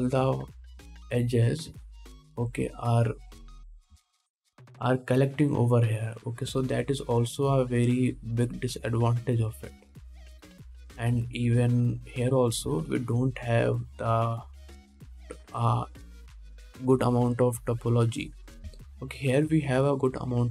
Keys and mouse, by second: 2.9 2, 3.4 a, 7.7 1, 13.9 a, 14.5 3, 14.9-20.5 drag.